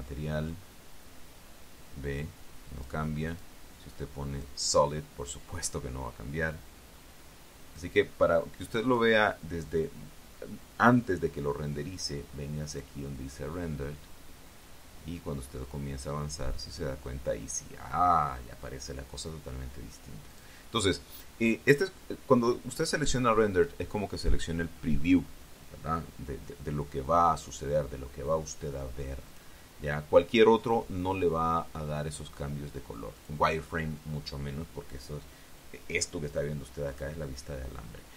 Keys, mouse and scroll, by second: 0.2 click, 1.3-3.9 drag, 4.1 click, 5.1 click, 6.1-8.8 drag, 9.7 click, 13.5 click, 16.0-20.3 drag, 21.1 click, 22.5 click, 30.1 click, 31.4 click, 34.0 click, 37.7 click.